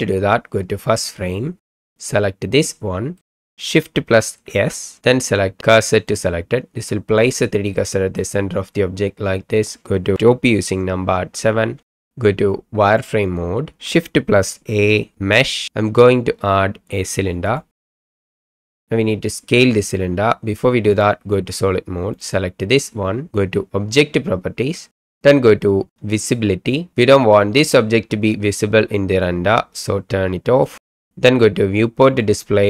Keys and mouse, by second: 2.5 click, 3.2 middle click, 4.5 shift+s, 7.7-8.2 middle drag, 10.2 KP_7, 11.9 shift+click, 12.9 click, 15.1 shift+a, 18.0 middle click, 18.3 shift+middle click, 18.7 shift+middle click, 26.2 click, 30.6 click, 32.1 click.